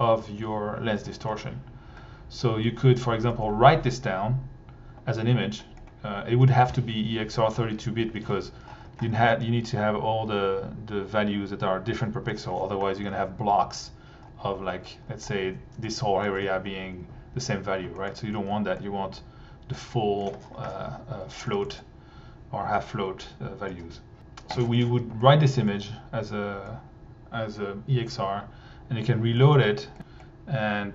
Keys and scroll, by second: 24.6 1, 25.1 alt+1, 28.6 1.